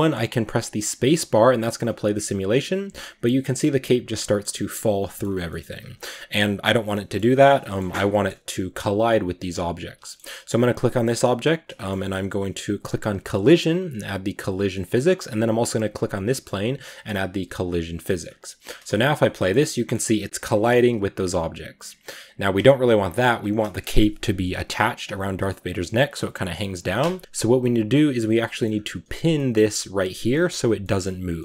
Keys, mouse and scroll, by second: 0.5 space, 2.1-2.9 scroll down 2, 2.9 space, 4.1-5.1 middle drag, 5.1 scroll up 3, 5.3-7.0 middle drag, 7.0 scroll up 1, 7.4 shift+middle drag, 7.7 scroll down 1, 8.0 middle click, 8.7 right click, 9.7 right click, 9.9 shift+middle click, 10.3 right click, 11.1-13.4 middle drag, 13.4-14.8 drag, 14.8-15.2 scroll down 2, 15.2 right click, 16.2-17.6 middle drag, 17.6-18.1 drag, 18.1-18.5 scroll up 1, 18.5 space, 19.4-22.4 middle drag, 22.4 space, 27.2 click, 27.2-28.5 middle drag, 28.5-29.2 scroll up 2, 29.2-31.4 middle drag.